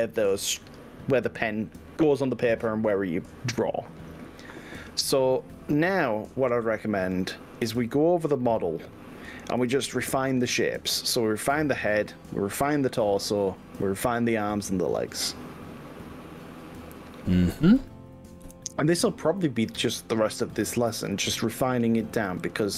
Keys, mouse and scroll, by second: 0.0-0.4 scroll up 3, 0.4-1.2 scroll down 4, 1.6-2.0 scroll down 3, 2.4-2.8 scroll down 2, 7.4 click, 8.0 click, 9.7 g, 10.8 click, 14.4 scroll up 1, 14.9 scroll down 1, 15.2-17.8 middle drag, 18.4 KP_1, 21.9 click, 22.3 g.